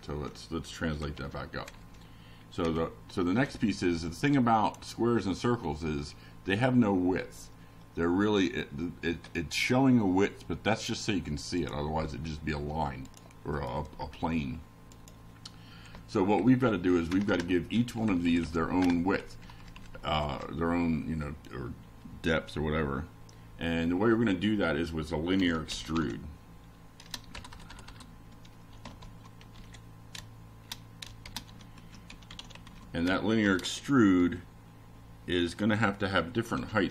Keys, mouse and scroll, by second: 5.3-7.3 typing, 8.4-13.0 typing, 15.8 5, 16.5 shift+0, 19.4 shift+[, 19.9 shift+Down, 21.3 Return, 21.9 shift+], 25.5 F5, 26.3 click, 28.8 click, 30.9-32.2 drag, 32.7 click, 33.5-34.7 drag, 35.5 ctrl+c, 36.2 click, 36.6 ctrl+v.